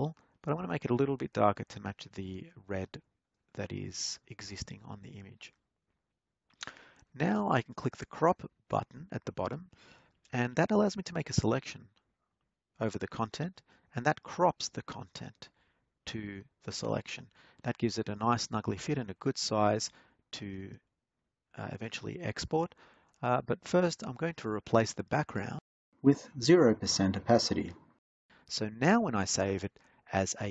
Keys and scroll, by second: 16.0 Return.